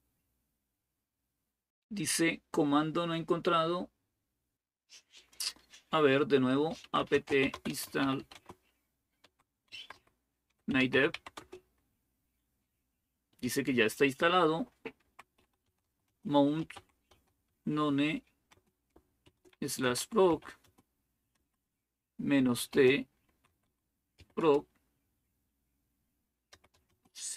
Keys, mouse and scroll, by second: 1.2-1.9 typing, 2.4-3.1 scroll down 1, 6.3-11.4 typing, 14.6-21.2 typing, 22.4-24.2 typing, 26.1-27.3 typing.